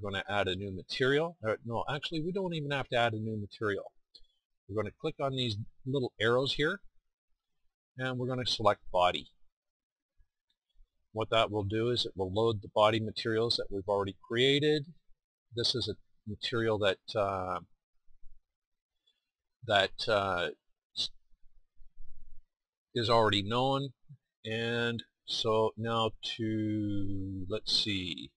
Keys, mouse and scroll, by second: 6.6-9.8 drag, 12.3-14.7 drag.